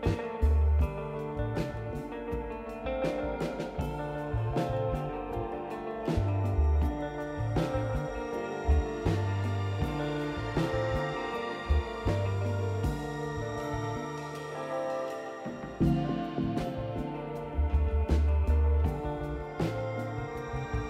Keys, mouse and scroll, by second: 1.9 click, 4.1 click, 8.7 click, 10.3 click, 13.2 click, 16.1 scroll down 2, 17.0-18.2 drag, 18.5-18.9 scroll down 4, 19.1 click, 19.7 click.